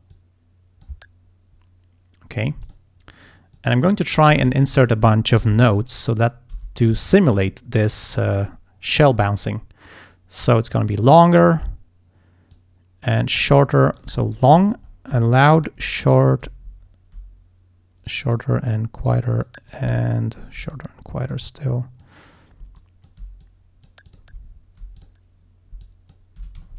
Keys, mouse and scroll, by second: 0.2 click, 2.7 click, 3.6 click, 4.6 scroll down 2, 5.5 d, 5.8 click, 6.6 d, 6.9 click, 7.6 scroll down 1, 8.0-8.6 scroll up 2, 9.3-11.5 drag, 12.6 click, 14.0 alt+click, 14.6-15.1 alt+scroll up 4, 15.6 alt+click, 16.1-16.4 alt+scroll up 1, 16.9 alt+scroll down 1, 18.4 click, 19.2 click, 19.8 alt+click, 20.0-20.6 alt+scroll down 2, 20.7 alt+click, 21.4 click, 22.9 alt+click, 23.5 alt+click, 24.2 click, 24.5 alt+scroll down 2, 25.0 alt+click, 25.9 alt+click.